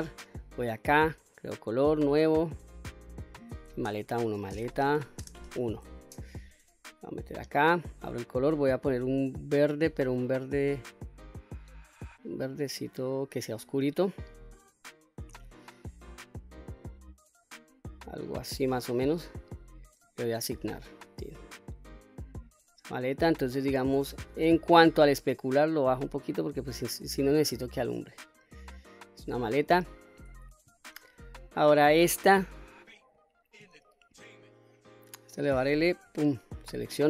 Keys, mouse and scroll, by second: 0.8 click, 2.1 click, 2.6 click, 3.2-6.7 drag, 7.5 click, 20.1 click, 21.1 click, 24.2-25.2 scroll down 2, 25.2-27.4 drag, 27.9-28.2 scroll down 1, 28.2-29.5 middle drag, 30.0 scroll up 1, 31.0 shift+middle click, 32.4 click, 34.3 middle click, 36.1 l.